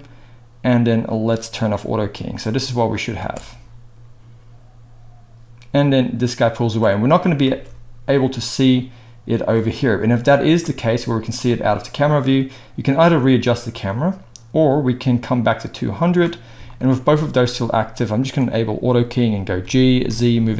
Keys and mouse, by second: 1.5 click, 1.6 middle click, 2.3-18.2 drag, 3.2 space, 7.5 space, 18.2-20.5 middle drag, 19.6 g.